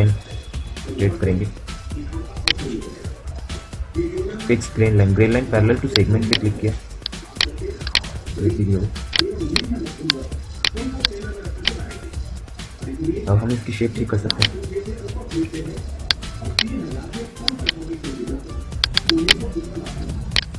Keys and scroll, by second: 14.9 Delete, 16.2 Delete, 17.4 Delete.